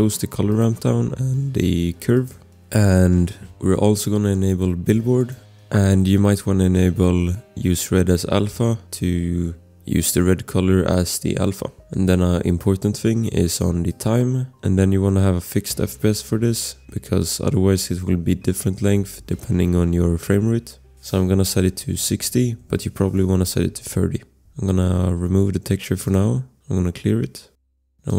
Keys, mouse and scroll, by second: 2.6 scroll, 5.2 click, 13.9 click, 14.6 scroll, 20.7 click, 21.7-22.6 typing, 24.3 ctrl+z, 24.6 scroll, 26.0 click, 27.4 scroll, 27.9 click.